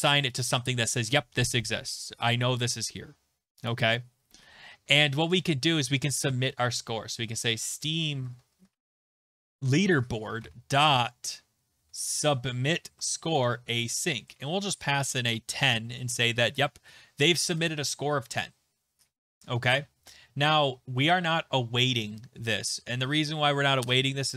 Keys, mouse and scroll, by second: 0.1 click, 0.4 click, 0.5 click, 3.7 click, 5.3 Return, 6.9-12.3 typing, 9.5 Tab, 12.8 Tab, 13.4-15.3 typing, 15.2 Right, 16.4 typing, 17.5 click, 17.7 click.